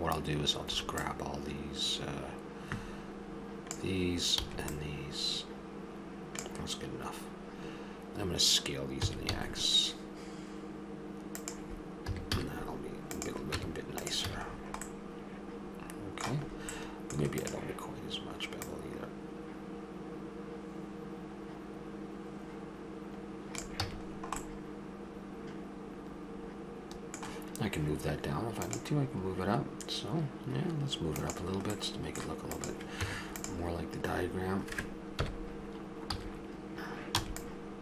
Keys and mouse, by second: 0.7 b, 4.4 b, 9.0 s, 12.1 a, 13.6 Tab, 14.3 a, 15.1 middle click, 17.4-20.4 drag, 23.8 a, 24.1-25.8 middle drag, 25.9 middle click, 26.2 middle click, 31.9 middle click, 32.5-35.2 drag, 33.0 Tab, 35.2 KP_1, 36.2 z, 37.2 b.